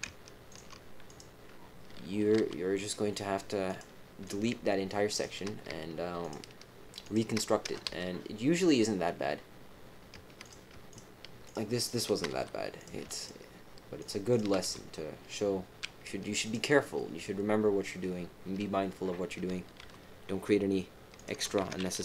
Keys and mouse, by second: 0.4 ctrl+click, 1.0 click, 2.3 g, 4.2 click, 5.1 shift+click, 6.2 shift+click, 7.0 shift+click, 7.8 f, 8.7 click, 10.4 click, 10.9 shift+click, 11.8 shift+click, 12.3 f, 12.7 click, 13.2 click, 13.9 click, 14.3 click, 14.6 f, 16.4 click, 19.7 g, 21.6 ctrl+z.